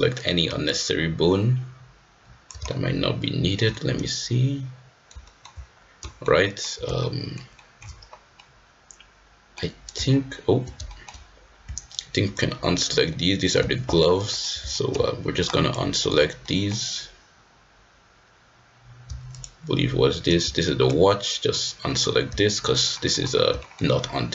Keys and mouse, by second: 0.7-2.4 ctrl+drag, 2.6 shift+middle click, 3.7-5.0 middle drag, 5.2 shift+middle click, 5.3 shift+click, 6.0 shift+middle click, 6.4 shift+middle click, 6.9 shift+middle click, 7.6 shift+middle click, 8.3-9.5 middle drag, 10.8 shift+click, 10.9 shift+middle click, 12.0 ctrl+click, 13.1 middle click, 14.2 ctrl+click, 14.7 shift+middle click, 15.4 ctrl+click, 16.4 middle click, 19.3 shift+click, 20.9 ctrl+click, 23.6 shift+middle click.